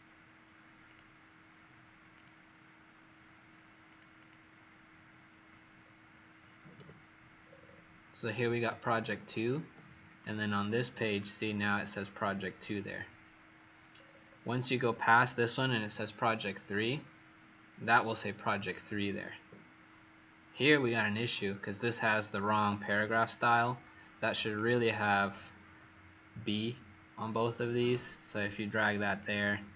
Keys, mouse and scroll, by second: 4.1 click, 5.7-6.7 alt+scroll down 1, 6.7 w, 7.3-8.6 scroll down 10, 8.8 click, 13.9-16.5 scroll down 8, 16.5 scroll down 2, 18.6-21.7 scroll down 6, 21.7-22.6 alt+scroll up 1, 22.6 alt+scroll up 1, 22.8 click, 28.5 click.